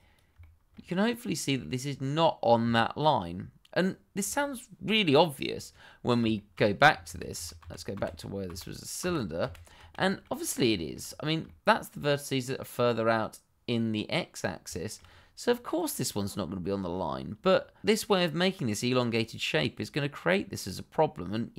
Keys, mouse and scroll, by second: 0.4 shift+middle click, 0.4 middle click, 0.7 shift+scroll, 0.8-1.2 scroll up 1, 1.6 shift+middle click, 2.8-4.8 scroll down 1, 5.6-6.0 scroll down 1, 6.3 shift+middle click, 6.7-7.0 scroll down 1, 7.0 ctrl+z, 9.9 middle click, 10.1-10.7 scroll up 2, 10.3 shift+middle click, 10.7 shift+middle click, 11.0 click, 11.5-12.1 scroll up 1, 14.7 shift+middle click, 15.0-15.5 shift+scroll up 1, 15.5 click, 16.4-16.9 scroll down 1, 18.3 click, 19.1-19.4 scroll down 1, 20.7 scroll up 1.